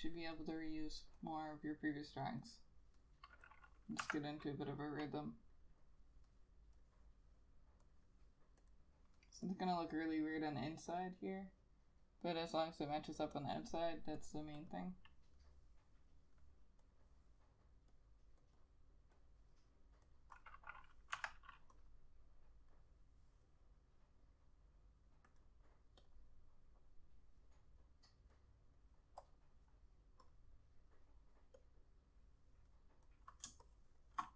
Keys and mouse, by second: 0.0 double click, 5.4 F6, 14.7 double click, 18.7 double click, 21.3 F6, 31.8 double click, 33.6 space.